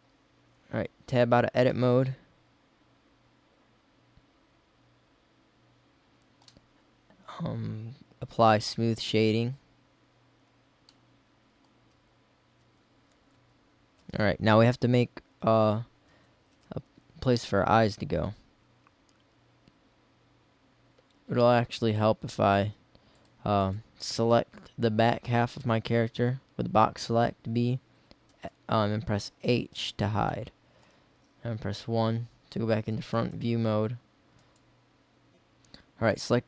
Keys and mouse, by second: 0.7 Tab, 8.5-10.3 drag, 11.8 Tab, 11.8-14.0 typing, 16.1 z, 16.6 z, 17.0 Tab, 21.9 b, 22.7 b, 24.1 b, 28.3 x, 29.5 h, 31.7 KP_1, 35.3 ctrl+z.